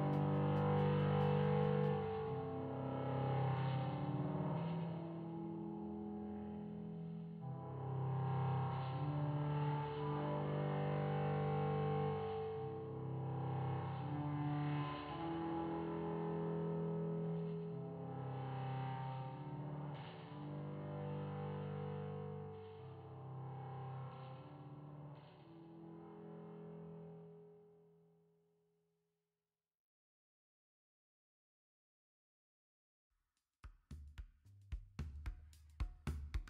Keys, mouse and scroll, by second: 1.3 KP_7, 2.4-4.6 drag, 7.4 click, 8.5 click, 9.6 super+c, 9.7 super+v, 10.6 click, 11.8 s, 13.8-16.4 drag, 17.1 click, 18.2 KP_7, 18.7-19.1 middle drag, 20.1-20.4 shift+middle drag, 20.9-22.0 drag, 22.9 KP_1, 23.8-24.8 drag, 27.3 super+c, 27.5 super+v, 28.4-29.6 drag, 30.6 KP_7, 32.0 click, 34.0 click.